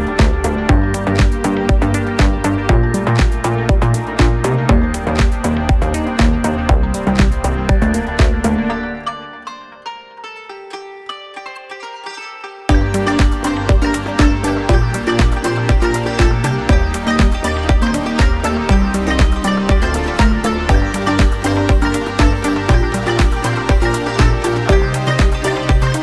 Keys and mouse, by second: 0.0-1.4 middle drag, 0.2 s, 1.4-10.4 drag, 10.4-20.7 middle drag, 10.8 KP_1, 10.9 KP_3, 11.6 shift+d, 14.7 r, 15.5 s, 16.8 g, 17.6 g, 18.8 r, 20.7-22.0 drag, 21.2 r, 22.0 middle click, 22.4-24.8 drag, 22.7 BackSpace, 24.5-26.0 typing, 24.8-26.0 middle drag.